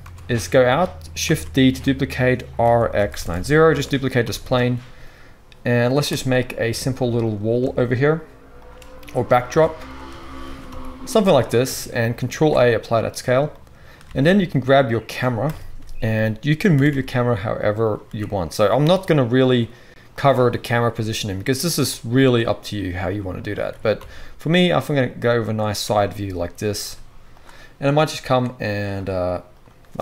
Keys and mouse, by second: 0.0 Tab, 1.3 shift+d, 4.2 g, 6.7 Tab, 7.7 shift+right click, 9.5 Tab, 10.4 s, 12.3 ctrl+a, 14.0 alt+a, 15.4 KP_0, 16.7 r, 18.0 r, 18.8 g, 20.8 g, 22.8-25.4 middle drag, 23.6 r, 25.4-28.1 drag, 25.7 g, 26.7 g, 28.1 middle click, 28.8-29.5 drag, 29.5-30.0 middle drag, 29.7-30.0 drag, 29.7-30.0 right drag.